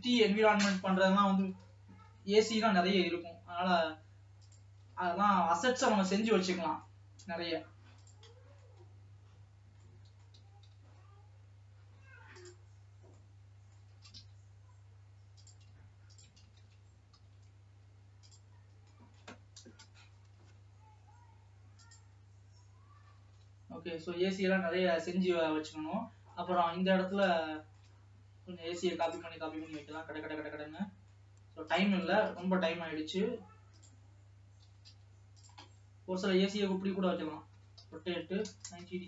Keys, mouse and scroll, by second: 0.7 shift+middle click, 1.5 g, 4.9 g, 6.6-7.0 scroll down 2, 7.0 middle click, 7.6 s, 8.8 middle click, 9.1 scroll up 2, 9.7 scroll down 1, 10.0 middle click, 10.5 g, 13.0-13.3 scroll down 1, 13.3 middle click, 14.1 shift+d, 16.5 shift+click, 16.7 shift+d, 18.8 scroll down 2, 19.0 shift+middle click, 19.8 KP_0, 22.6-23.9 drag, 23.9 alt+a, 26.1 scroll up 1, 26.9-28.4 middle drag, 28.4-28.8 scroll up 3, 29.4 click, 29.8 middle click, 30.3-31.0 scroll down 4, 31.0 middle click, 32.0 click, 32.3 shift+d, 34.7 g, 35.8 middle click, 36.7-37.3 scroll up 4, 37.3 scroll down 2, 37.7 r.